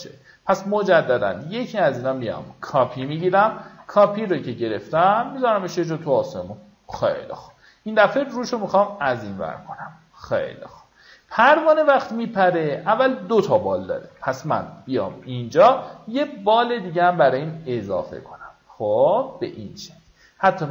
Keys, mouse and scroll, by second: 0.4 ctrl+click, 1.5 alt+click, 5.0-7.0 drag, 8.1 right click, 8.9 click, 10.4 alt+scroll up 1, 11.0 alt+scroll up 1, 11.4-12.6 drag, 12.9-13.3 alt+scroll up 1, 15.5 t, 16.6-20.7 drag.